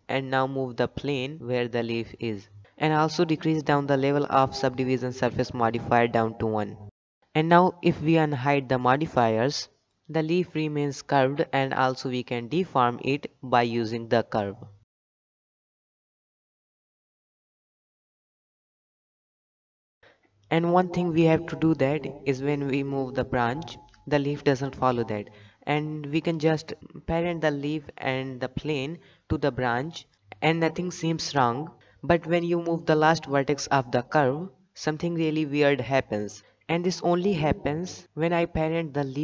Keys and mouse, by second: 3.2 click, 5.1 click, 6.9 click, 7.2-7.8 middle drag, 9.0 click, 9.4-10.1 middle drag, 11.3 click, 12.0 click, 12.9-13.5 middle drag, 13.5 Tab, 14.3 g, 16.5 click, 16.7 g, 18.1 click, 18.3 g, 19.2 Tab, 19.7-20.2 middle drag, 20.5 shift+middle drag, 21.2-21.6 middle drag, 21.8 g, 24.1 click, 24.8 click, 25.4 shift+click, 26.3 shift+click, 28.3 ctrl+p, 29.7 click, 30.7 g, 33.3 KP_3, 33.6 Tab, 34.4 click, 34.7 g, 37.7 click.